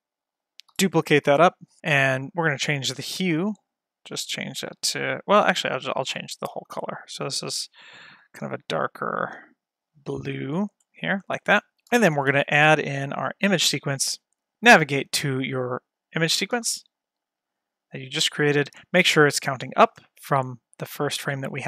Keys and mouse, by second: 0.9 shift+d, 1.4 y, 2.2 click, 12.2 shift+a, 13.6-14.3 drag, 15.3 click, 16.6 a.